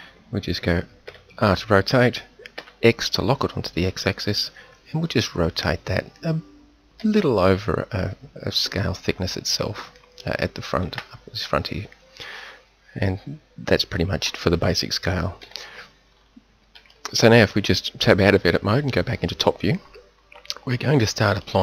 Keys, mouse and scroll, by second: 1.0 r, 14.3 Tab, 15.4 KP_7.